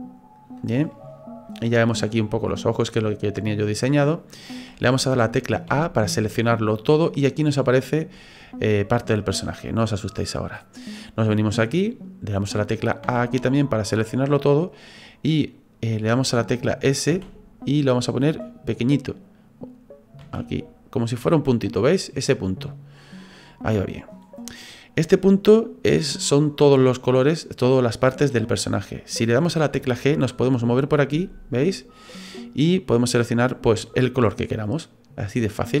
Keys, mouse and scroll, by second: 5.7 a, 13.0 a, 17.1 s, 20.2 s, 29.8 g.